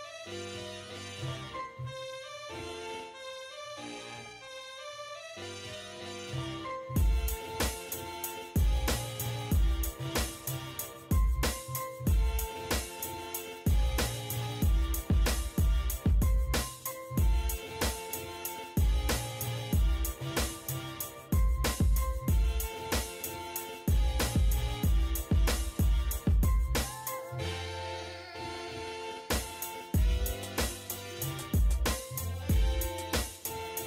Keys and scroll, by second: 3.8 Escape, 5.4 m, 5.6 space, 6.6 7, 7.1 Return, 8.2 l, 8.3 space, 11.8-12.7 typing, 14.0 1, 14.4 9, 14.7 Return, 15.0 Escape, 19.9 e, 20.0 space, 22.6 1, 22.9 0, 23.1 Return, 24.0 Escape, 26.7-29.4 typing, 26.9 Return, 29.7 Return, 30.2 Escape, 33.5 e, 33.6 space.